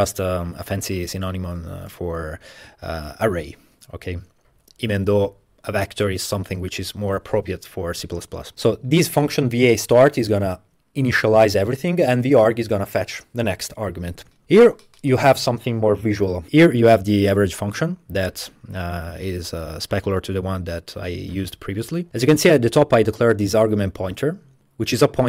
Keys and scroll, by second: 14.4 Tab.